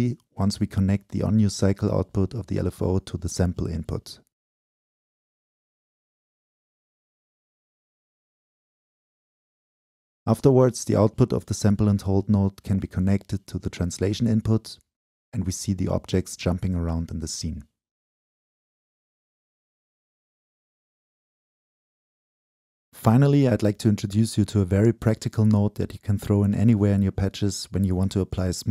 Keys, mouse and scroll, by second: 3.6-10.2 drag, 10.4 click, 13.1 click, 13.6 Delete, 14.4-18.3 drag, 18.8 click, 19.1 right click, 19.6-21.7 drag, 22.2 click, 23.2 click, 23.7-25.0 right drag, 25.0 click, 25.9-28.7 shift+drag.